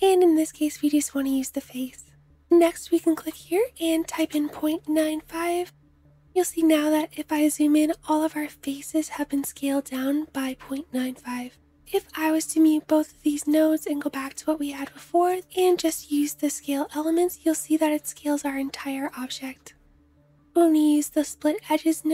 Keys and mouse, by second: 11.8 m, 12.1 m, 14.9 click, 14.9 middle click, 14.9 right click, 15.5 m, 16.9 m, 17.6 m, 19.1 m, 19.6 m, 20.1 m, 21.1 m.